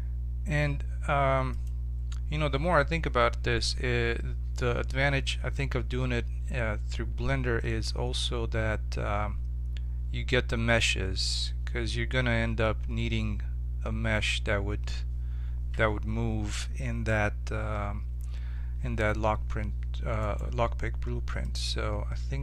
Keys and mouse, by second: 20.2-22.4 right drag, 21.4-22.4 drag.